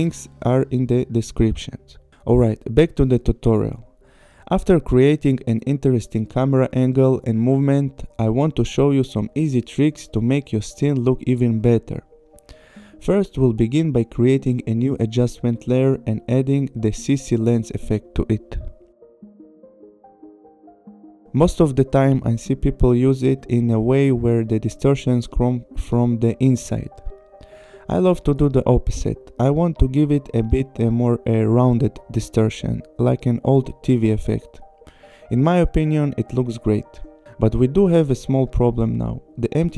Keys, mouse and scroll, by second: 8.5 click, 9.9 click, 13.0 right click, 15.0 click, 16.6 click, 17.9-18.9 typing, 20.8 click, 23.6 click, 27.6 click, 27.9 click, 30.5 click, 32.8 click, 35.9 click, 36.1 KP_2, 36.3 KP_0, 36.6 click, 37.4 click, 37.8 click.